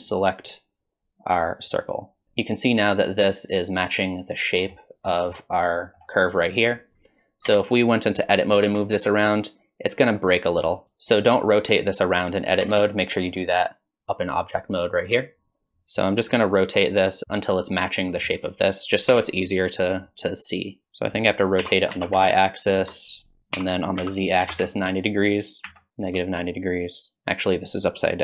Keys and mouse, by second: 2.2-4.6 drag, 5.1 middle drag, 5.9 middle click, 7.5 Tab, 8.7 r, 10.8 Tab, 12.6 Tab, 19.1 r, 23.5 r.